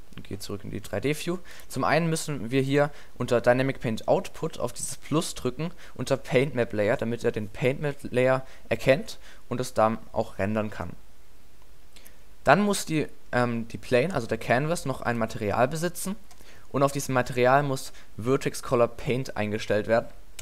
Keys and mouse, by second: 1.3 middle click, 4.9-8.8 middle drag, 10.7-15.1 middle drag, 17.5 middle click.